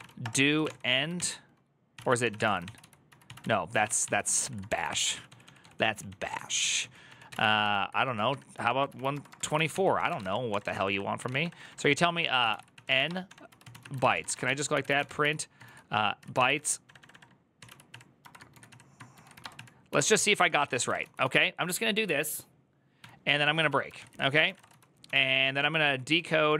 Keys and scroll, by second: 0.0-21.5 typing, 0.9 ctrl+c, 15.9 Tab, 16.1 ctrl+c, 22.5-26.5 typing.